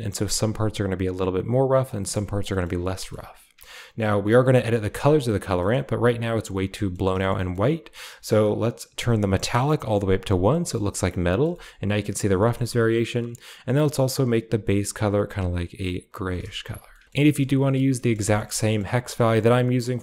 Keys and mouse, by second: 2.0 click, 2.4 middle click, 2.8 middle click, 4.9 click, 5.5 middle click, 6.7 middle click, 7.2-7.5 middle drag, 8.0 middle click, 9.5 click, 10.5 middle click, 11.2 middle click, 11.5 shift+middle click, 11.8-12.2 middle drag, 12.4 shift+middle click, 13.3 click, 17.0 ctrl+v, 17.9 middle click, 18.2-18.7 shift+middle drag, 19.1 middle click.